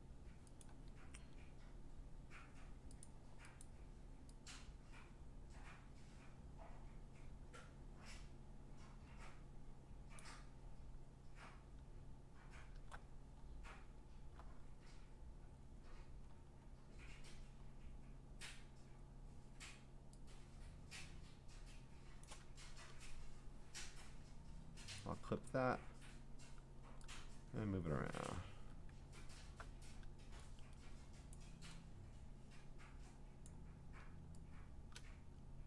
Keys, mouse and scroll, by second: 0.6 click, 1.6-3.0 scroll, 3.0 click, 3.0 scroll, 3.6 click, 10.2 click, 13.1 scroll, 14.6 scroll down 3, 15.0 scroll down 2, 15.5-17.6 scroll up 11, 17.6 scroll down 3, 17.9-18.6 scroll up 3, 18.6-19.0 scroll down 4, 19.0-19.4 scroll up 2, 19.4-20.6 scroll down 3, 22.0 scroll, 22.2 click, 25.0 alt+click, 25.5 v, 28.3 click, 28.6 ctrl+t, 29.0-31.3 scroll, 31.3 click, 33.4 click.